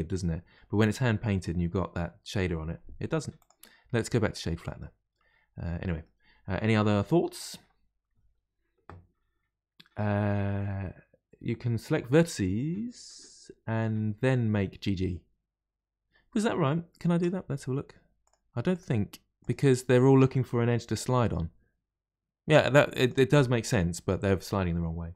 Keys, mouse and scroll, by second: 3.3-4.8 right drag, 4.8-7.8 middle drag, 16.5-17.1 middle drag, 17.1 Tab, 17.4-18.2 scroll up 1, 18.2 click, 18.7 shift+click, 19.4 shift+click, 19.9 shift+click, 21.0 g.